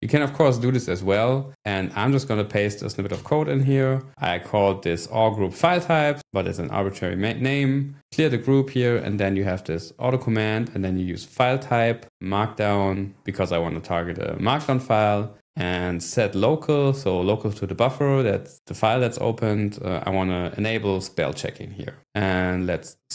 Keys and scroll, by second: 3.1 p, 22.5-23.1 typing.